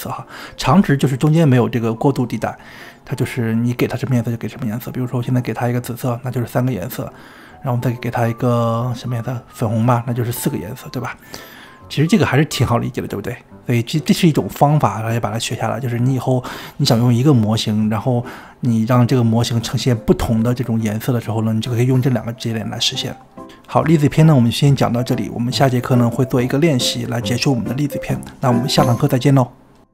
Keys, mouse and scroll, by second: 7.9-9.5 drag, 21.5-23.3 drag, 23.5 middle click, 24.4-26.3 scroll down 2.